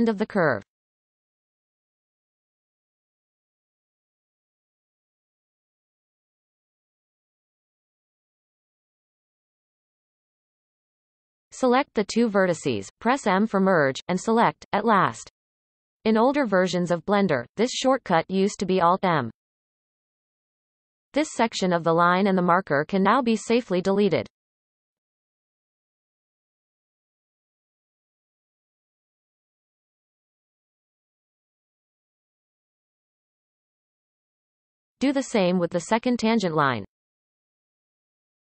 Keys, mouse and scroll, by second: 0.0-2.0 scroll up 5, 0.6-1.0 shift+middle drag, 2.0 g, 4.1-5.7 scroll up 15, 5.7 shift+middle click, 6.2-6.8 scroll up 1, 6.8-7.1 scroll up 1, 7.1 g, 11.3 b, 16.1 m, 16.4 m, 17.4-19.0 scroll down 16, 20.7-21.8 scroll down 3, 21.8-22.7 scroll down 5, 22.7-25.4 shift+middle drag, 25.4-25.8 scroll up 1, 25.8-27.1 shift+middle drag, 27.1 shift+click, 27.6-28.8 shift+middle drag, 28.8-29.5 scroll down 1, 29.5 shift+click, 30.4 x, 32.8-33.5 scroll down 1, 35.8 click, 36.6 click, 37.1-37.4 scroll down 2.